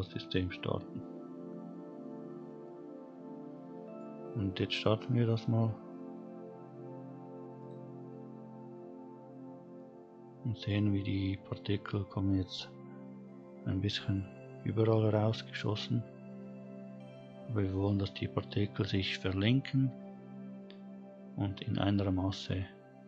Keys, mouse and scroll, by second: 0.5 scroll down 1, 1.9-2.6 scroll down 1, 2.6-4.0 middle drag, 4.2-5.0 scroll up 1, 7.6 click, 9.8-10.7 middle drag, 12.0-12.7 scroll up 2, 13.2-14.5 scroll up 1, 14.5-15.0 scroll down 1, 15.0 middle click, 17.5 middle click, 19.3-20.4 scroll up 1, 22.2 scroll down 1.